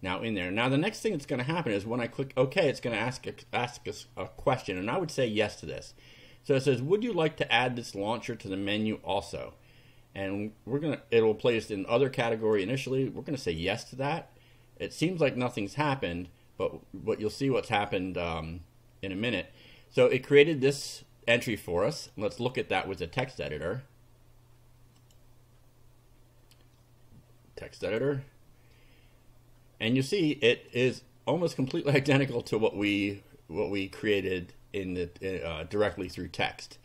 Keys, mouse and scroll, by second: 0.1 click, 4.6 click, 11.7-12.7 drag, 13.4 click, 21.9 right click, 22.8 click, 25.0 click, 27.9 click, 30.7-32.2 drag, 32.4 click, 35.9 click, 36.6 click.